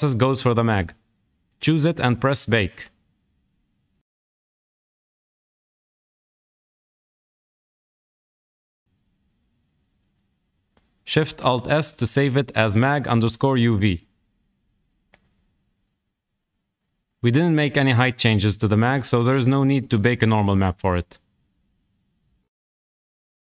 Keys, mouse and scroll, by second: 0.5-1.2 shift+middle drag, 1.2-1.9 scroll down 1, 1.9 click, 3.5 click, 12.1 alt+shift+s.